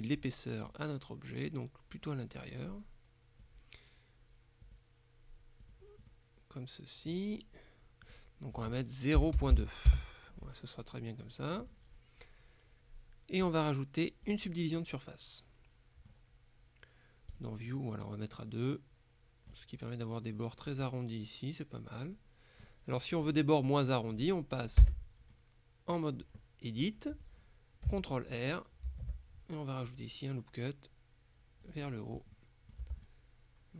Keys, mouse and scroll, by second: 0.7-4.0 drag, 4.7 click, 5.7 click, 6.2 right click, 8.1 click, 9.3 KP_0, 9.5 KP_Decimal, 9.6 KP_2, 10.0 KP_Enter, 10.9-12.1 middle drag, 13.5 click, 14.4 click, 14.9 middle click, 17.4 click, 17.9 middle click, 20.8-23.2 middle drag, 23.9 middle click, 24.9 Tab, 25.4-26.5 middle drag, 28.9 ctrl+r, 29.9 click, 31.7 click, 32.2 scroll down 1, 32.4 middle click, 32.9 Tab, 33.1 click.